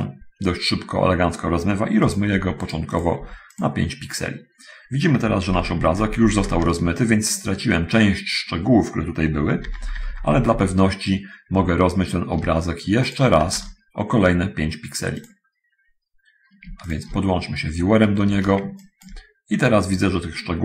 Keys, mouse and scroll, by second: 2.3 click, 2.6 5, 2.9 click, 3.8 click, 5.7 alt+v, 5.9 alt+v, 9.9 alt+v, 13.4 middle click, 13.5 shift+d, 15.1 middle click, 17.2 ctrl+shift+click, 19.1 ctrl+shift+middle click, 19.2 ctrl+click.